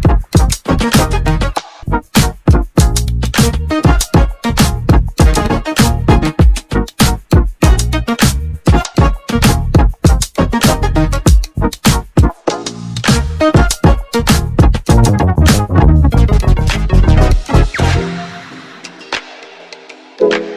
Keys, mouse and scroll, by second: 2.0-4.6 middle drag, 4.9-9.6 middle drag, 9.8-12.4 drag, 13.8 n, 14.2 t, 15.2-15.6 scroll down 1, 17.0 click, 17.7 click, 18.4 click, 19.0 Tab, 19.4 click.